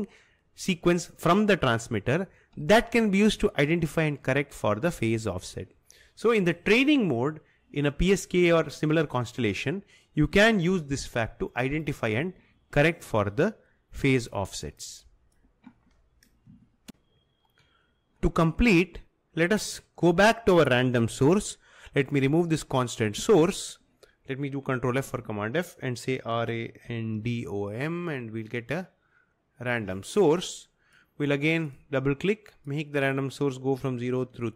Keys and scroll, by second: 23.4 Delete, 25.1 ctrl+f, 26.2-27.6 typing, 34.4 4.